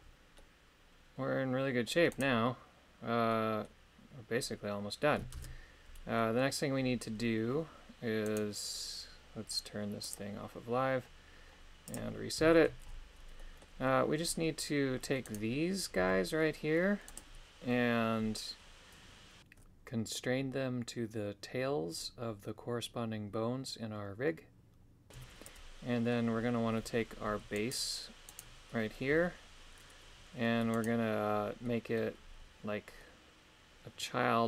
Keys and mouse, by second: 6.1-8.3 middle drag, 6.1 shift+space, 8.3 right click, 10.0 click, 11.9 click, 12.5 shift+middle click, 13.3 middle click, 20.9 right click, 24.9 shift+middle click, 25.4 middle click, 27.7 right click, 28.2 right click, 30.8 right click, 31.6 middle click, 33.0-34.4 middle drag.